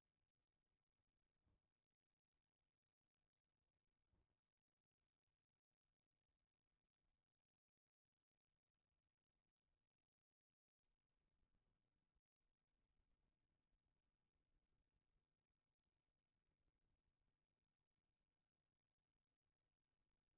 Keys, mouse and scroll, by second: 2.4 click, 3.6 click, 4.5-5.8 middle drag, 7.5-8.3 drag, 12.2 click, 18.7 click.